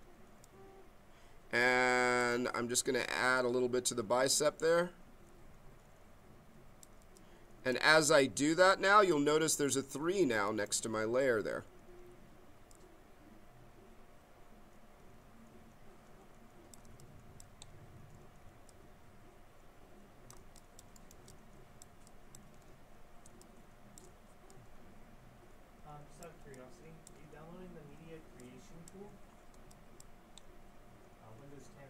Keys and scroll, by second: 23.2 b.